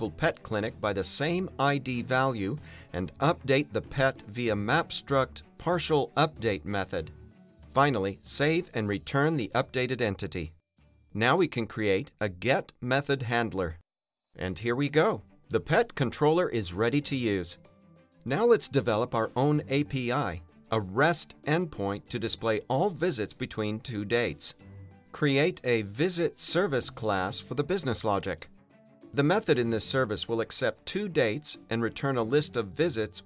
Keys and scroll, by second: 0.5 Return, 4.1 Return, 6.2 Return, 11.7 alt+Return, 12.4 Return, 13.0 Return, 13.9 Return, 14.5 Return, 19.0 super+n, 21.1 Return, 23.2 Return, 24.0 Return, 24.6 alt+shift+Left, 24.8 Return, 25.9 Return, 26.6 Return, 32.7 Return.